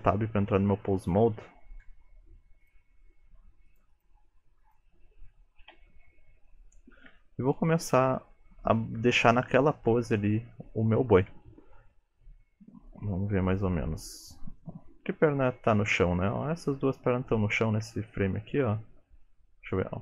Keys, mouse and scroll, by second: 5.8 n, 6.5 middle click, 7.7-8.2 scroll down 5, 8.0 middle click, 11.4 KP_3, 12.1 shift+middle click, 12.3 scroll up 6, 12.8 shift+middle click, 13.5 click, 14.7 middle click, 17.9 KP_3, 19.4 middle click.